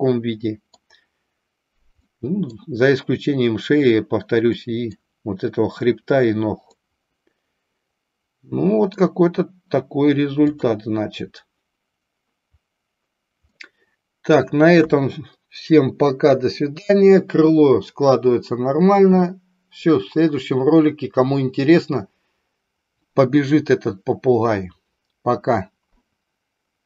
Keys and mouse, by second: 0.0 middle click, 2.0 middle click, 4.5 middle click, 6.8-9.1 middle drag, 10.5 click, 13.5-14.5 middle drag.